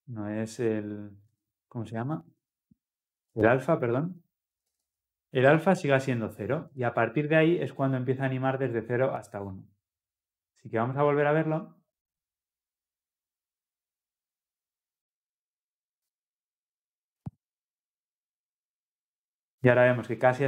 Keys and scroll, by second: 5.5 Return, 11.2 ctrl+F10.